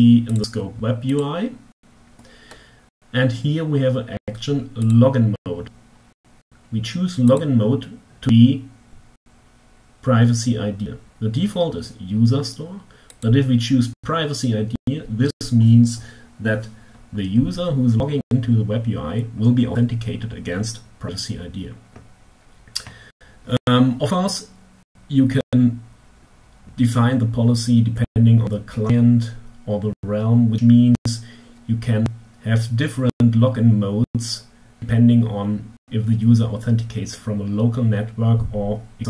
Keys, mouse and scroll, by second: 0.8 click, 4.1 click, 6.4 click, 12.7 click.